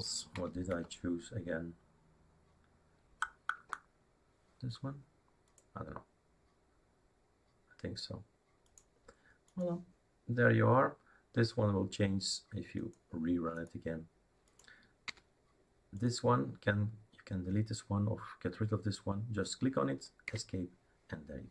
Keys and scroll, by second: 0.4 End, 0.5 Down, 0.7 Down, 3.6 Up, 15.1 Escape, 20.3 Escape.